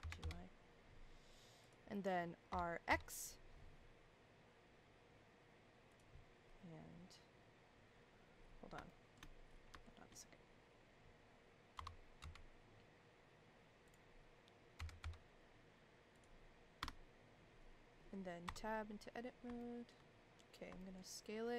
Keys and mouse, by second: 0.0 g, 2.5 r, 8.9-9.2 shift+middle drag, 9.8-10.1 shift+middle drag, 11.7 r, 14.8 g, 16.8 KP_1, 18.5 Tab, 19.6 shift+middle click, 20.8 shift+middle click.